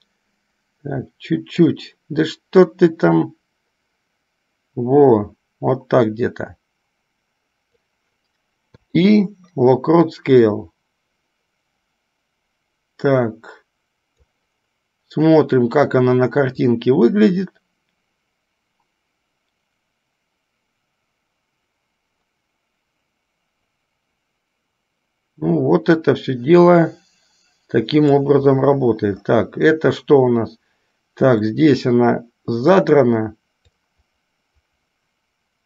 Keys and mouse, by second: 0.2-1.9 drag, 3.0-8.2 drag, 10.4-14.5 drag, 16.9-28.4 drag, 31.5-33.0 drag, 34.1-35.6 drag.